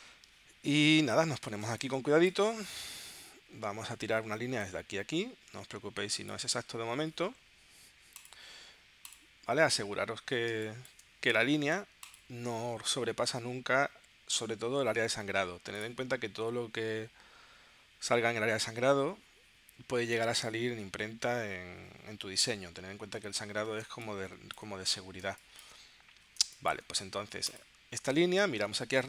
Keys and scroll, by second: 1.7 space, 10.5 space, 23.8 space, 25.2 space, 26.4 space.